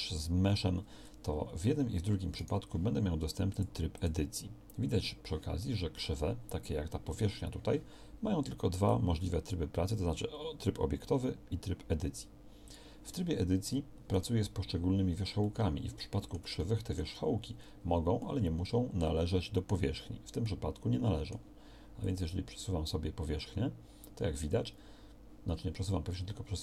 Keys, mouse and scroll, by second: 2.7-3.7 drag, 5.2-7.8 drag, 15.5 click.